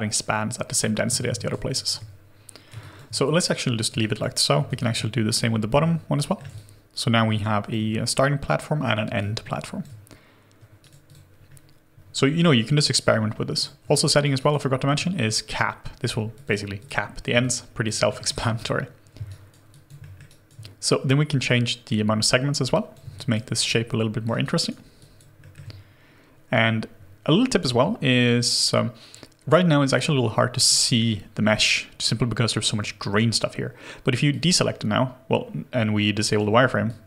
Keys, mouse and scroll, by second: 1.2 ctrl+z, 2.1 alt+click, 2.7 alt+click, 3.9 alt+click, 4.7 alt+click, 6.5 alt+click, 6.5 shift+middle click, 9.1 alt+click, 10.8 right click, 11.3 scroll up 1, 13.9 alt+click, 14.3 alt+right click, 14.6 alt+middle click, 16.7 double click, 17.4 alt+click, 18.0 alt+middle click, 19.2 alt+right click, 19.7 alt+click, 20.0 alt+middle click, 20.2 alt+right click, 23.5 alt+right click, 23.7 alt+middle click, 24.4 alt+right click, 24.9 alt+click, 25.4 alt+middle click, 36.8 alt+click.